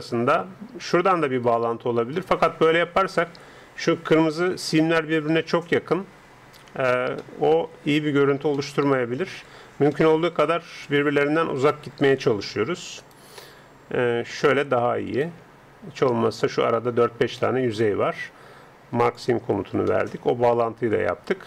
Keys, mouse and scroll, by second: 0.8-7.1 right drag, 7.2-10.9 middle drag, 10.9-15.0 right drag, 15.0 middle click, 15.2-17.2 right drag, 17.4-19.0 middle drag, 19.0-21.1 drag, 19.9 middle click, 21.1-21.4 middle drag.